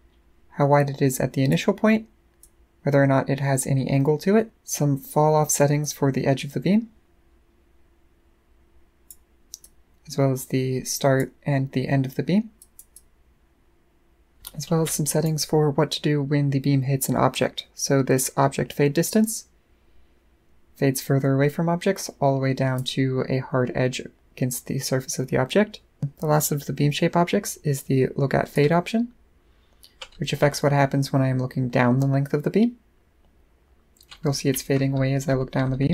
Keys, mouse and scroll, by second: 2.4-4.5 drag, 5.8-9.1 drag, 9.6-11.2 drag, 12.6 click, 12.9-14.3 drag, 14.3 right click, 19.1-22.8 drag, 28.5-35.9 right drag.